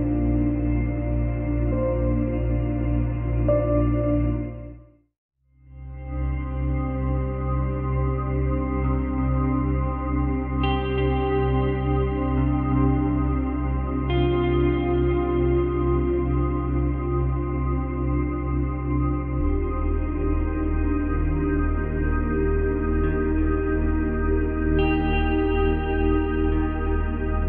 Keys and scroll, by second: 24.1 ctrl+z, 27.1 space.